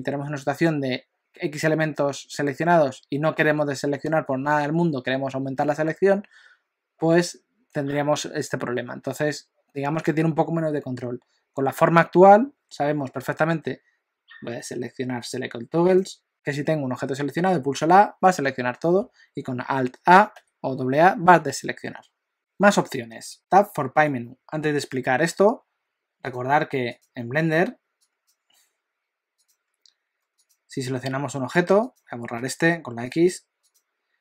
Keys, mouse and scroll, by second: 16.3 click, 20.4 a, 27.0 click, 30.4 click, 31.8 click, 32.4 x, 33.7 click.